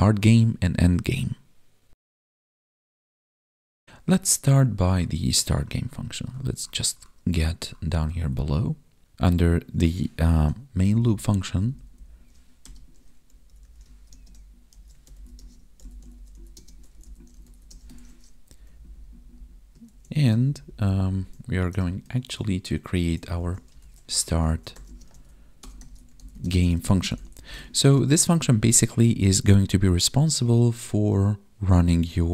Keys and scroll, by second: 10.7 Up, 14.1 space, 15.3 space, 16.5 space, 17.9 ctrl+s, 18.4 Down, 19.8 ctrl+s, 20.4 ctrl+Down, 22.1 ctrl+s, 23.2 ctrl+/, 24.8 space, 26.3 space, 27.6 ctrl+s.